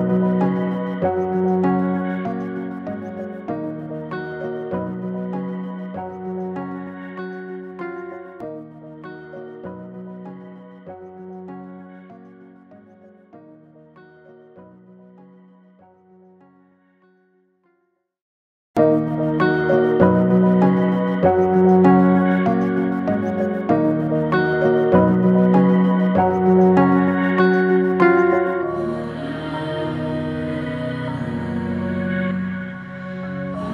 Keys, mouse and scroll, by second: 8.3 Left, 12.2 click, 13.5 Down, 14.1 Right, 16.1 click, 17.1 Up, 17.6 Right, 19.8 click, 23.8-26.9 alt+drag, 31.5 p, 31.8 ctrl+shift+[.